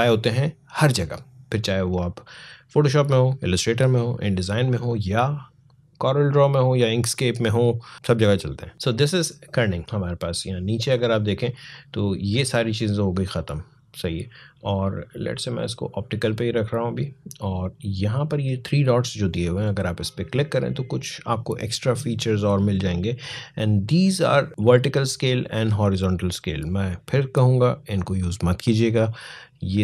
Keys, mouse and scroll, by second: 8.7-9.8 alt+scroll down 1, 9.8-10.6 scroll down 1, 14.5 click, 19.8 click.